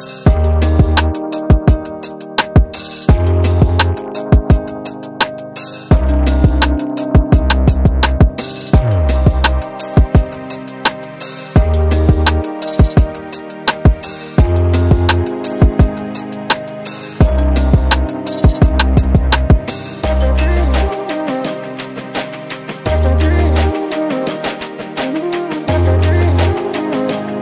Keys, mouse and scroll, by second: 0.3 scroll down 3, 0.7 alt+click, 1.7 alt+click, 2.7 alt+click, 13.2 scroll up 2, 13.5 alt+click, 14.1 alt+middle click, 14.4 scroll down 1, 14.8 alt+middle click, 15.5 scroll down 2, 15.9 scroll up 1, 16.0 scroll down 2, 16.3 scroll up 2, 16.7 alt+middle click, 17.3 scroll down 2, 17.6 alt+middle click, 19.1-24.5 drag, 24.8 alt+click, 25.2 click, 25.8 alt+click, 26.1 shift+right click, 26.8 alt+click.